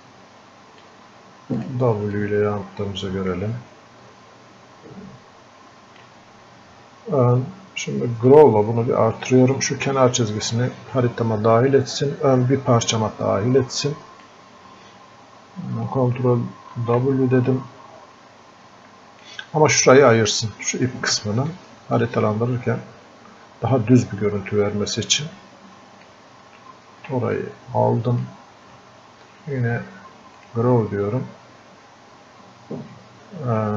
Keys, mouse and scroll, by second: 13.0-16.8 drag, 16.8 ctrl+w, 17.5-22.0 drag, 22.0-27.4 ctrl+shift+drag, 27.7 click.